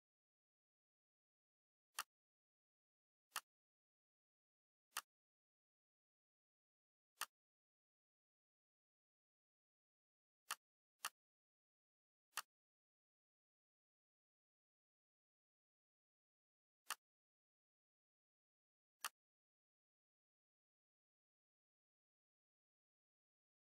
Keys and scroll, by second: 6.2 ctrl+c, 9.5 ctrl+v, 21.0 Right, 21.1 Right, 21.3 Right, 21.4-22.0 Right, 21.7 Right, 21.9 Right, 22.2 Right, 22.5 Down, 22.7 Down, 23.1 Right.